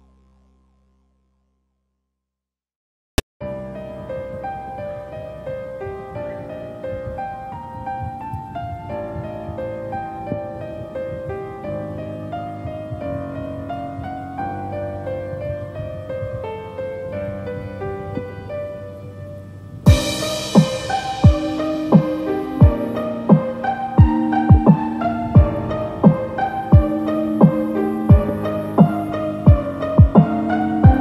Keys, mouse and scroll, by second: 0.0 2, 0.1 4, 1.5 4, 3.8 shift+middle click, 5.2 scroll up 5, 5.9 shift+middle click, 5.9 click, 5.9 g, 6.0 g, 7.7 click, 7.7 shift+middle click, 7.7 g, 7.9 g, 9.6 click, 9.6 shift+middle click, 9.7 g, 11.2 shift+middle click, 11.5 click, 11.7 shift+middle click, 11.7 scroll down 1, 11.7 g, 11.9 click, 12.1 g, 13.0 shift+middle click, 13.1 scroll down 1, 13.1 g, 14.1 click, 14.2 click, 14.2 g, 15.4 click, 15.5 g, 16.8 click, 16.8 g, 17.9 click, 17.9 g, 18.9 click, 19.1 click, 19.1 g, 20.1 click, 20.9 click, 20.9 shift+middle click, 20.9 g, 21.1 g, 21.2 click, 21.3 g, 22.2 click, 22.4 click, 22.4 g, 22.9 g, 24.1 click, 24.1-26.7 typing, 25.6 click, 26.5 click, 27.7 click, 27.7 g, 28.2 g, 29.7 click, 30.0 g, 30.1 shift+middle click, 30.1 click, 30.1 scroll down 2, 30.3 g.